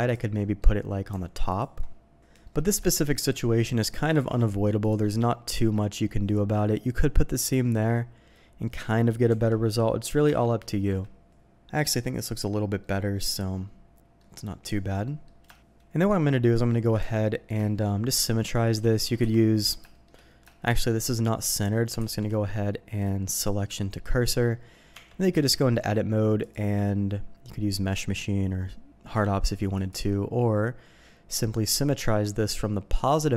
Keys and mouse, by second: 0.3 click, 1.5 alt+click, 2.4 middle click, 2.8 shift+middle click, 3.3 middle click, 4.1 ctrl+e, 5.2 middle click, 6.2 middle click, 6.8 middle click, 7.6 middle click, 8.6 middle click, 9.3 Tab, 9.8 middle click, 10.2 Tab, 10.7 shift+middle click, 11.7 middle click, 12.8-13.9 middle drag, 13.9-14.2 drag, 14.6 Tab, 15.0 click, 15.5 shift+click, 16.2 click, 17.0 Tab, 17.3 click, 17.6 shift+click, 17.8 drag, 18.2 click, 19.2 KP_7, 19.9 shift+click, 20.5 shift+drag, 22.0 shift+s, 24.9 Tab, 25.3 a, 26.4-29.9 drag.